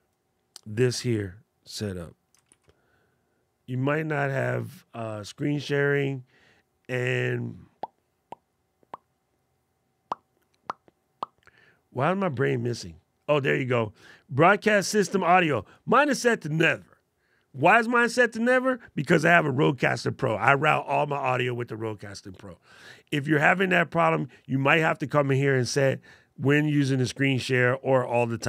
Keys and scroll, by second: 2.4 shift+super+d.